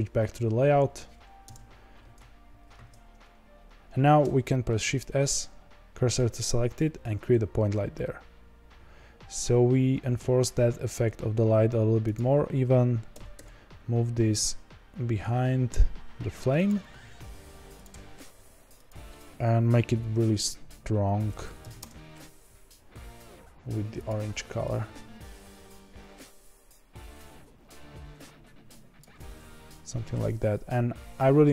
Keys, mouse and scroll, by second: 0.5-1.4 scroll down 7, 1.4 KP_0, 3.4-3.7 scroll up 4, 3.7 ctrl+z, 6.1 shift+s, 13.1 g, 16.8 g, 24.6 click, 29.3-30.0 scroll down 5, 30.0-31.5 scroll up 4.